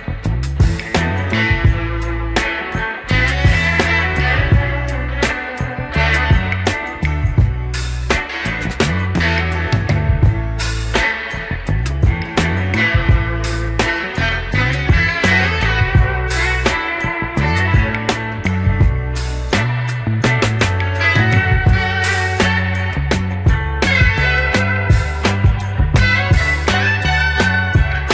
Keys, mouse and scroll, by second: 0.9 scroll up 2, 1.2 shift+middle drag, 1.7-2.2 middle drag, 2.5-4.2 middle drag, 5.0-6.1 middle drag, 6.4 scroll up 1, 7.0 shift+scroll up 1, 7.4-7.8 shift+middle drag, 12.0-15.5 middle drag, 16.1 ctrl+s, 23.6 click, 24.3-25.4 middle drag, 25.9-27.4 scroll up 1.